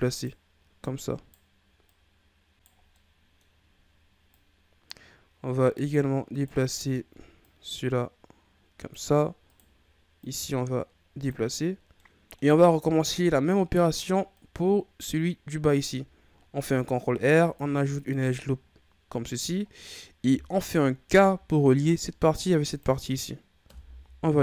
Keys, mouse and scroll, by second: 0.8 right click, 1.8 right click, 2.7 scroll down 4, 2.9 middle click, 3.5-4.3 scroll up 4, 4.3-6.3 drag, 6.3 right click, 7.4-9.4 drag, 9.4 right click, 10.2-11.7 drag, 11.7 scroll down 1, 11.9 middle click, 12.6-13.0 scroll up 4, 13.0-14.3 middle drag, 14.3 right click, 16.6 ctrl+r, 18.6-19.7 scroll down 2, 19.7-21.0 scroll up 2, 21.0 k.